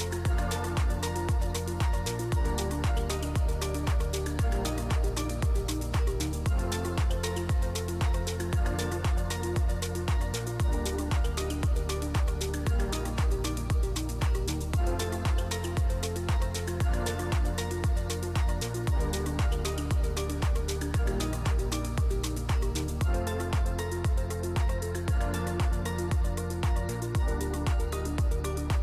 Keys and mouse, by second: 4.4 ctrl+s, 7.5 click, 9.4-11.6 drag, 25.0 ctrl+s.